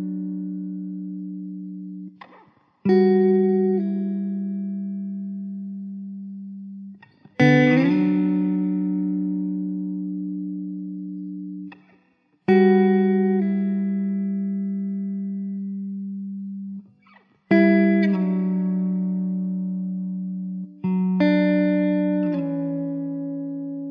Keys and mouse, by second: 3.8 alt+w, 4.4 alt+middle click, 5.9 alt+w, 9.9 1, 17.3 alt+w, 18.9 alt+w, 19.1 middle click, 21.7 ctrl+z.